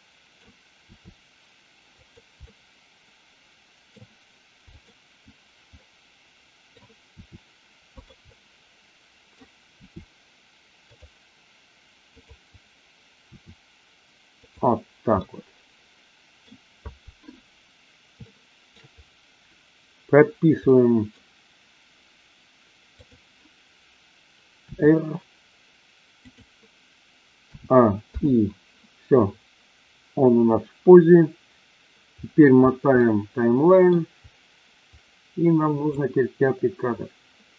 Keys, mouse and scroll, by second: 0.9 r, 1.9 click, 2.4-3.9 middle drag, 4.8 click, 5.8 middle click, 7.1 r, 7.9 click, 8.3-9.4 middle drag, 9.8 r, 10.9 click, 12.1-12.8 drag, 13.3 r, 14.4 click, 15.1-16.4 middle drag, 18.1-18.8 shift+middle drag, 20.6-21.1 middle drag, 24.6 r, 26.3 click, 27.4 a, 28.2 i, 33.0 middle click, 36.0-37.5 drag.